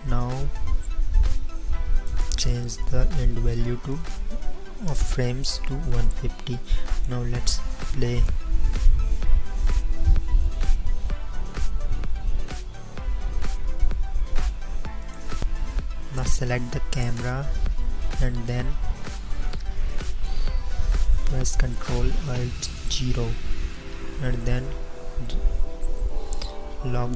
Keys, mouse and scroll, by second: 15.4 n, 17.1 middle click, 18.6 middle click, 18.8-22.2 middle drag, 22.7 ctrl+alt+KP_0, 26.0 n.